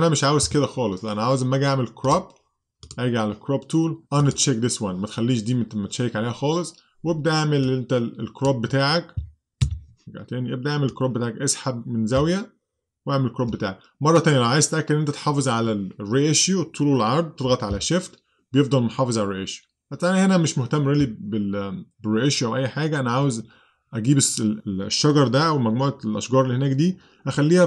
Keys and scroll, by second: 9.7 super+z.